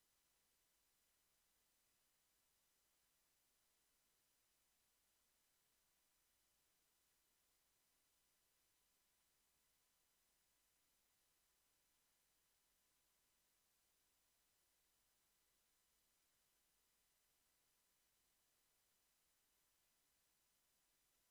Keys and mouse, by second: 18.7 a, 19.2 ctrl+s, 19.9 KP_Decimal.